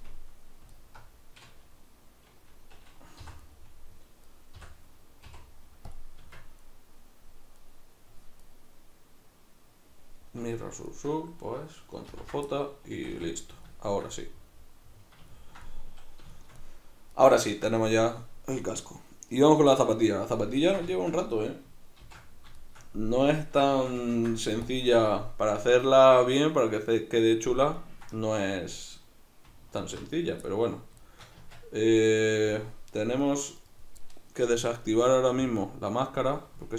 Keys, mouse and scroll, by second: 0.7 alt+right click, 3.2 v, 3.5 right click, 4.2 right click, 4.6 l, 6.3 Tab, 6.6 right click, 7.6 right click, 8.5 right click, 10.5 right drag, 10.9 shift+right click, 12.1 ctrl+j, 12.5 middle click, 13.0 a, 13.3-32.0 middle drag, 22.0 shift+c, 24.1 ctrl+s, 29.8 alt+h, 31.4 Tab, 32.0 right click, 33.2 right click, 33.6 right click, 35.4-36.6 drag, 36.6-36.7 shift+middle drag.